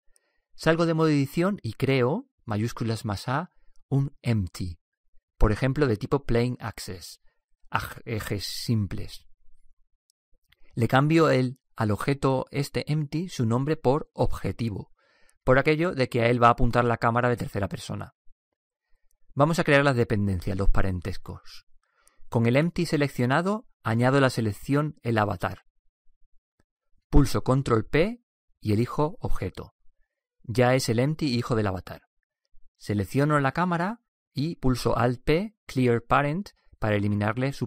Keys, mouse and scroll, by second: 0.9 Tab, 2.8 shift+a, 11.1-13.9 drag, 25.3-27.1 right drag, 28.0 ctrl+p, 33.9-35.9 right drag, 37.2 alt+p.